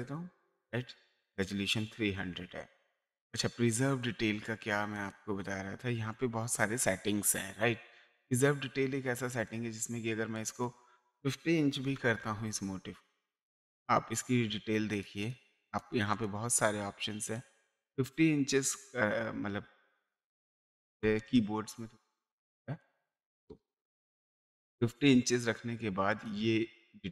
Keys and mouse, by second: 1.4 click, 4.9 click, 9.2 click, 10.4 click, 11.8 KP_5, 12.2 KP_0, 13.4 space, 14.9 click, 17.0 space, 17.4 click, 20.5 BackSpace, 22.3 click, 23.4 BackSpace, 23.9 KP_5, 26.1 click.